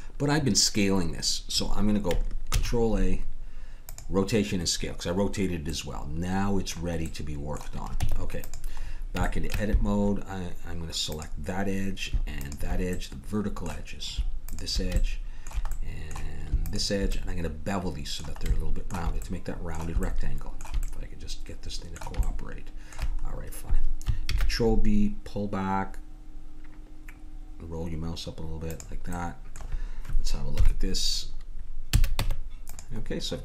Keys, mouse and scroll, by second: 2.5 ctrl+a, 5.3-7.1 middle drag, 8.0 Tab, 11.1 click, 12.9-14.0 drag, 14.2 middle click, 14.5-16.3 drag, 16.6-18.4 drag, 19.5-25.2 middle drag, 24.3 ctrl+b, 29.2 middle click, 30.6 KP_1, 31.9 a, 32.2 Tab.